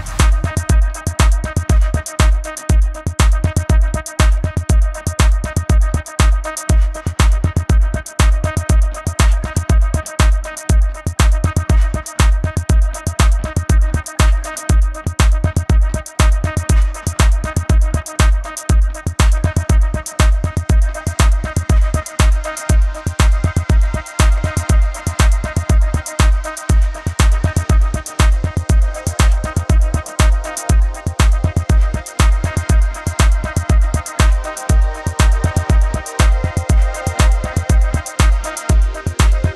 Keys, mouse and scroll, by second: 0.5 b, 0.6 space, 0.7 click, 2.5 ctrl+z, 2.8 click, 4.0 space, 4.2 click, 4.4 space, 4.8 v, 5.2 click, 5.9 ctrl+alt+click, 7.1 ctrl+click, 7.7 b, 8.1 shift+click, 9.3 v, 9.6 click, 9.9 a, 10.0 click, 11.0 click, 11.4 a, 11.5 click, 12.6 click, 13.0-14.5 typing, 13.5 click, 14.6 click, 16.2 ctrl+alt+click, 17.1 click, 17.9 ctrl+=, 18.1 space, 18.2 click, 18.3 space, 18.6 click, 19.8 shift+click, 20.0 b, 20.2 space, 20.3 click, 23.0 ctrl+z, 23.8 click, 26.0 shift+click, 27.2 space, 27.9 ctrl+z, 28.6 shift+click, 29.5 typing, 30.0 click, 30.6 ctrl+alt+click, 31.6 ctrl+click, 32.0 b, 35.5 click, 37.3 ctrl+z, 37.9 click, 39.0 ctrl+z, 39.4 click.